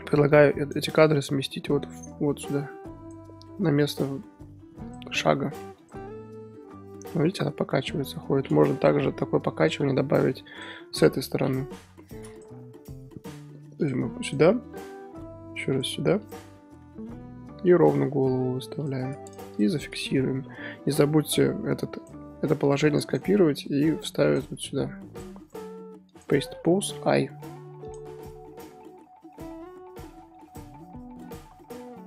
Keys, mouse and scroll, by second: 1.8-7.1 drag, 7.1-8.9 middle drag, 8.9 KP_1, 9.6-11.0 drag, 11.0-12.1 scroll up 4, 11.5-12.4 drag, 12.1 KP_1, 12.9 r, 14.3 click, 14.7 r, 16.3 click, 16.7 r, 19.5 shift+click, 20.4 i, 24.2 click, 25.4 right click, 25.5-26.1 drag, 26.1 right click, 27.9-28.5 drag, 28.5-28.8 scroll down 2, 28.8-29.9 middle drag, 29.9 scroll down 4, 30.1-31.4 middle drag, 31.4-31.9 scroll down 4, 31.9-32.0 scroll up 4.